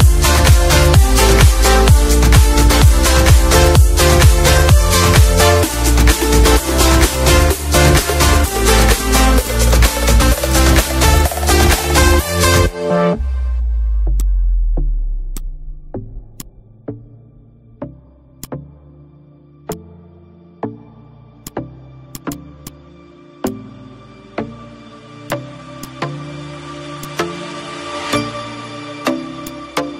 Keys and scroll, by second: 0.2 Delete, 1.8 ctrl+z, 2.2 -, 2.5 space, 5.2 Up, 7.6 d, 10.1 d, 11.8 z, 12.6 F2, 17.9 F5, 21.7 ctrl+shift+a, 23.8 ctrl+/, 24.7 ctrl+z, 26.4 ctrl+shift+=, 27.9 F5.